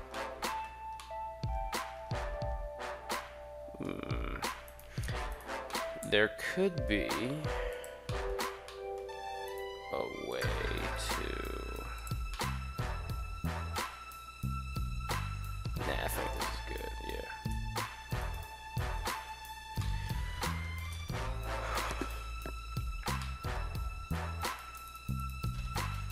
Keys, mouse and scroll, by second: 0.8-3.6 middle drag, 4.4 shift+right click, 5.0 shift+right click, 5.3 middle click, 5.8 g, 7.5 drag, 7.7-8.1 middle drag, 8.6 middle click, 9.2 right click, 9.9 g, 10.1 drag, 10.6 right click, 11.0 g, 11.8 click, 12.2-12.6 middle drag, 12.7-13.3 middle drag, 13.6-15.5 middle drag, 16.0 right click, 17.2 e, 18.0 right click, 19.1 ctrl+z, 19.6-19.9 middle drag, 20.6 KP_3, 23.0 middle click, 23.9 3, 24.2 right click, 24.6 shift+right click, 24.9 shift+right click, 25.7 KP_3.